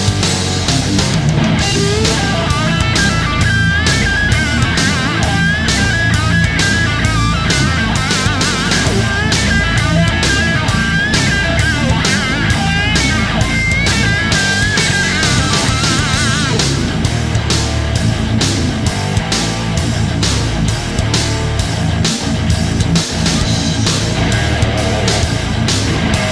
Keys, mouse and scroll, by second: 4.3-5.4 drag, 21.1 click.